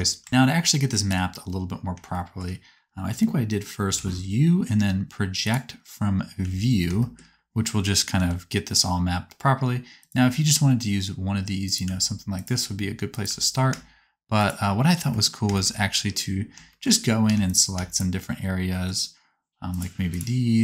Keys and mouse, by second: 0.2 Tab, 0.3 a, 1.0 KP_7, 3.9 u, 6.4 a, 8.1 g, 10.1 r, 11.8 s, 12.6 r, 13.4 g, 17.3 3, 17.9 shift+click.